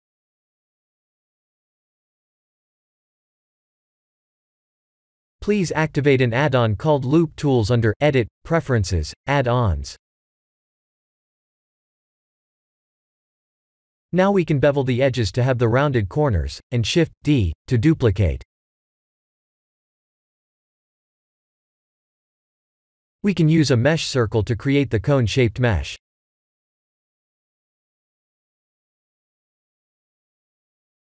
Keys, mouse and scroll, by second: 0.2 KP_1, 0.8 scroll down 3, 1.3 shift+middle click, 2.1 click, 2.5 shift+a, 7.7-8.5 scroll up 3, 8.4 middle click, 9.5 Tab, 9.9 middle click, 11.3 ctrl+b, 13.5 ctrl+z, 14.4 1, 15.0 ctrl+b, 18.6 Tab, 19.0 middle click, 20.1 scroll up 1, 21.7 shift+d, 24.5 click, 25.0 shift+a, 29.9 shift+z, 30.7 s.